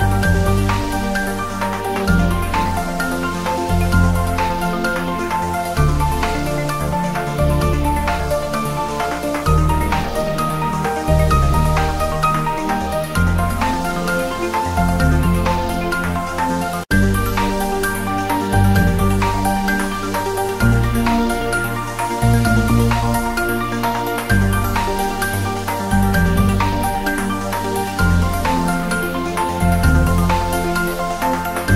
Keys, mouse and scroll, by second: 0.8 Tab, 1.8 click, 2.3 Tab, 2.8 ctrl+r, 3.0 click, 3.8 click, 4.1 ctrl+r, 4.3 click, 5.0 Tab, 5.6-5.9 scroll down 1, 6.3 click, 6.8 scroll down 1, 7.9 click, 8.4 shift+d, 9.1 click, 10.1 scroll up 1, 10.7 click, 11.0 g, 11.3 Right, 11.9 Up, 13.5 Right, 14.6 Down, 15.5 Return, 16.3 click, 17.3 shift+z, 17.9 click, 18.7 s, 18.9 click, 19.3 g, 19.4 Left, 19.5 Down, 19.8 Left, 20.0 Up, 20.1 Left, 20.4 Up, 20.5 Left, 20.7 Down, 21.0 shift+z, 21.2 Down, 21.8 Return, 22.2 g, 22.3 Down, 22.7 Right, 22.9 Return, 23.1 shift+z, 23.6 g, 23.7 Up, 23.9 Right, 24.1 Down, 24.3 Left, 24.7 Return, 25.2 shift+z, 25.6 click, 26.4 scroll down 1, 26.7 g, 27.1 x, 27.8 click, 28.9-29.4 scroll down 1, 29.4 s, 30.0 click.